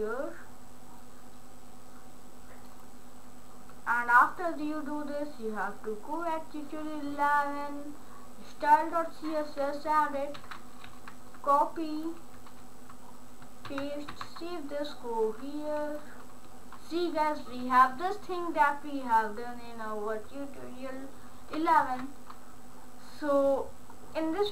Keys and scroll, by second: 13.7 ctrl+v, 14.1 ctrl+s.